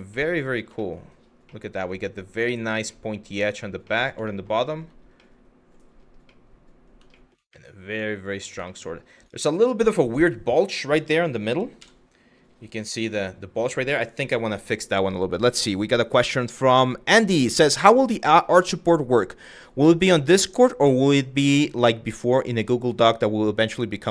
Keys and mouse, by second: 0.5 shift+middle click, 1.2-2.3 middle drag, 2.5-3.3 middle drag, 3.6 middle click, 4.0 shift+middle click, 4.2 shift+middle drag, 4.8-5.3 middle drag, 5.9-6.5 middle drag, 6.9 shift+middle click, 7.2-8.0 middle drag, 8.3 shift+middle drag, 9.4 click, 9.8 Tab, 11.4 KP_3.